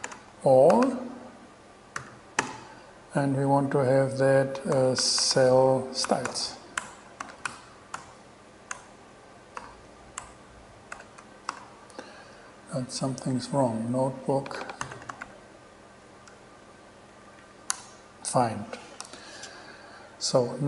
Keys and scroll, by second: 0.0-2.2 typing, 4.7-8.9 typing, 9.8 alt+6, 10.4 alt+BackSpace, 11.1 BackSpace, 11.4 alt+e, 11.7 alt+6, 14.8-15.9 typing, 17.3 Down, 17.9 Return, 19.2 shift+Return.